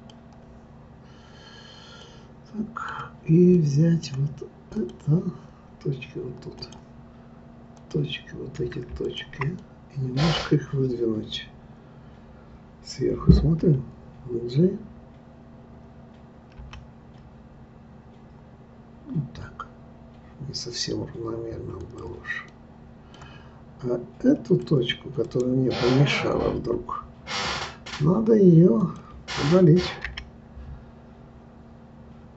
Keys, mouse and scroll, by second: 0.0-1.3 drag, 1.3 scroll up 2, 2.0-4.7 middle drag, 4.7 click, 6.6 click, 7.7 click, 9.0 shift+click, 9.6-12.6 middle drag, 13.6 KP_7, 16.6 g, 22.5-24.5 middle drag, 24.5 click, 25.3-28.3 right drag, 30.0 Delete.